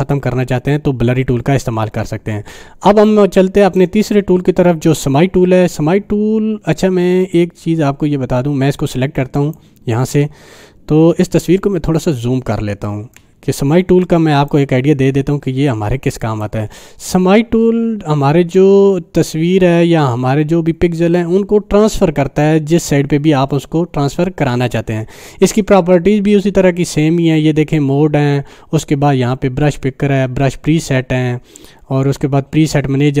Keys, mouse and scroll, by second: 3.0-4.0 drag, 9.4 click, 11.3 scroll up 1, 13.1 ctrl+alt+space, 14.5 ctrl+alt+space, 14.5-16.6 click.